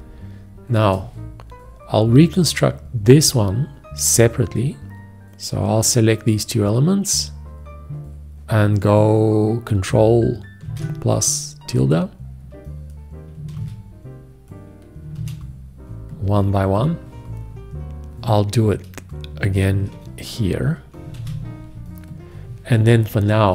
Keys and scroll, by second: 10.9 ctrl+`, 13.8 ctrl+`, 15.4 ctrl+`, 19.9 ctrl+`, 21.4 ctrl+`.